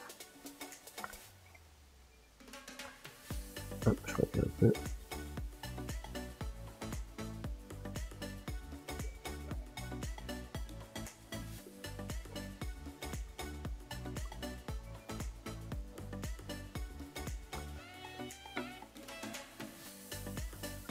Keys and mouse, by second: 0.6-3.2 shift+middle drag, 3.2 f, 4.5-6.7 drag, 6.7 f, 8.2-20.9 drag.